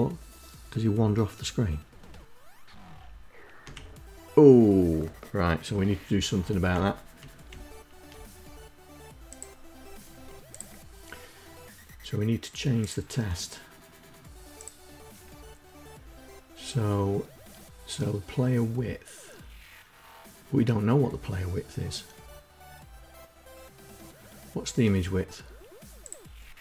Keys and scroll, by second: 2.4 Down, 5.6 Left, 6.3 Down, 7.0 Left.